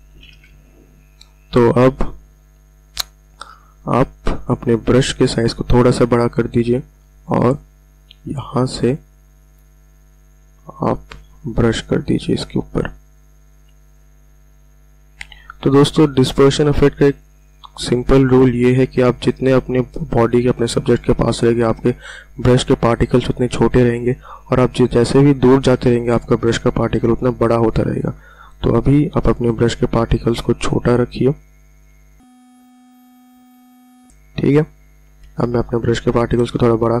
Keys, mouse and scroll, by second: 0.6 ], 0.8 ], 3.6 ], 4.2 [, 4.4 [, 7.2 click, 12.3 [, 13.4 ], 13.6 ], 13.8 click, 15.5 click, 16.4 [, 16.6 [, 17.0 click, 17.8 ], 26.0 ], 26.2 ], 28.7 click, 29.8 ], 30.2 [, 30.8 click, 31.9 ], 32.2 [, 32.3 click, 32.6 [, 32.7 click, 34.6 ], 34.8 ], 34.9 ].